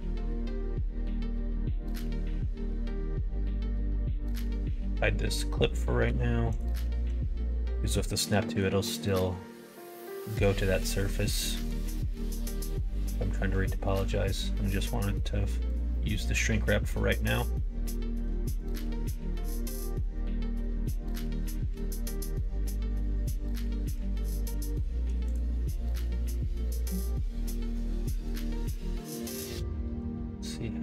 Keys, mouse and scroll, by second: 1.2 e, 2.9 middle click, 4.1 Tab, 4.4 click, 6.0 h, 6.5 click, 7.0 Tab, 8.1 middle click, 10.1 middle click, 10.7 middle click, 11.5 middle click, 11.9 middle click, 13.8 e, 15.9 middle click, 16.5 middle click, 18.4 alt+click, 18.9 middle click, 19.2 middle click, 19.5 middle click, 20.1 middle click, 20.4 w, 21.6 e, 25.9 middle click, 26.6 ctrl+z, 28.0 e.